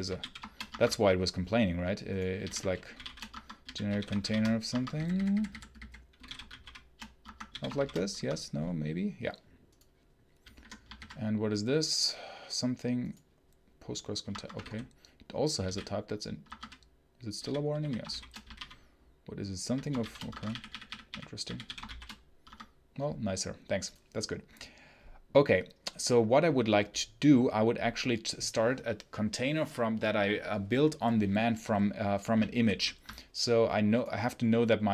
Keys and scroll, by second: 0.0-0.7 typing, 2.0-8.1 typing, 7.1 Escape, 10.8 ctrl+b, 14.1 Escape, 14.4-18.5 typing, 16.3 Escape, 19.6-22.2 typing, 22.3 Escape.